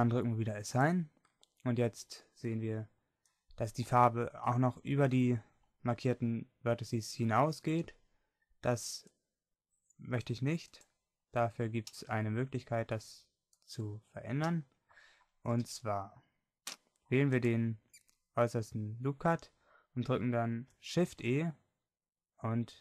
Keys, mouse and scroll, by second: 0.9 click, 1.9 click, 11.8-13.0 middle drag, 21.2 shift+e.